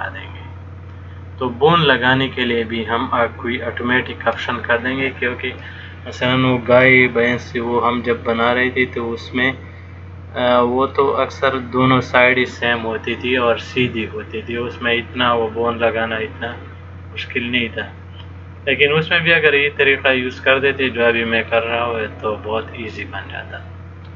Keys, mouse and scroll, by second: 8.3 middle click.